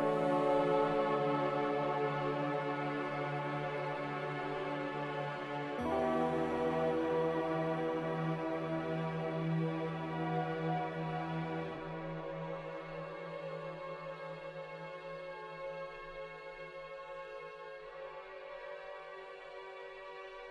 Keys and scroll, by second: 0.6 ctrl+z, 1.2 ctrl+z, 6.6 Delete, 7.9 z, 9.4 Delete, 10.3 Delete, 11.1 Delete, 15.8 typing, 17.1 Delete, 17.6 Tab, 18.0 1.